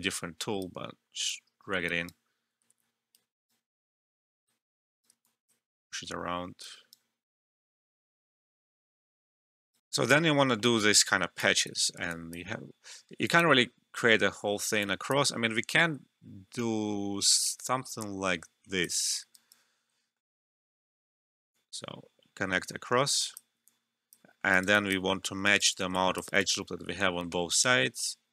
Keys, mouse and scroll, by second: 0.6 right click, 2.7 ctrl+z, 3.1-5.2 right drag, 5.2 alt+click, 5.7 alt+middle click, 6.6 right click, 8.3 alt+middle click, 9.3 right click, 9.8 alt+F12, 10.7 alt+middle click, 11.0 alt+click, 11.8 alt+middle click, 12.1 alt+click, 13.2 alt+click, 14.8 alt+click, 15.3 alt+middle click, 15.6 alt+right click, 16.5-19.3 drag, 19.3 alt+right click, 20.0 alt+middle click, 21.5-23.6 drag, 23.6 alt+click, 24.2 alt+middle click, 24.5 alt+right click, 25.0 alt+middle click, 25.4 alt+right click, 25.9 alt+click, 26.2 alt+right click, 26.5 alt+middle click, 27.9-28.3 drag.